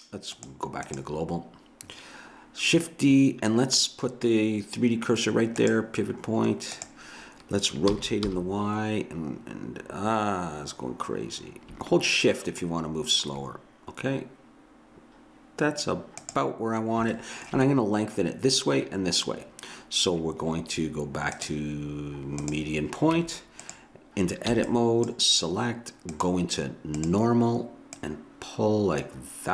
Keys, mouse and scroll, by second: 0.4-5.0 drag, 5.6 click, 6.5 click, 7.9 r, 17.2 middle click, 21.3 click, 23.1 Tab, 24.5 b.